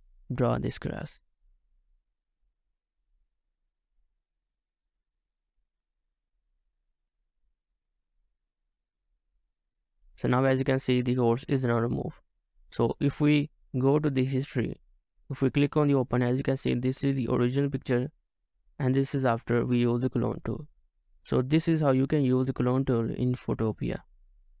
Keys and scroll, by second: 4.0 typing, 14.3-15.6 scroll up 1, 15.6 typing, 17.8-18.3 scroll down 1, 18.7 typing.